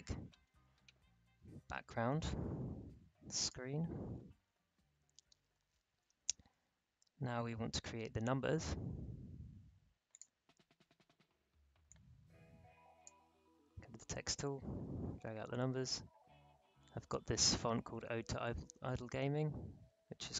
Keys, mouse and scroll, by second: 0.0 ctrl+s, 3.4 click, 10.1-15.4 drag.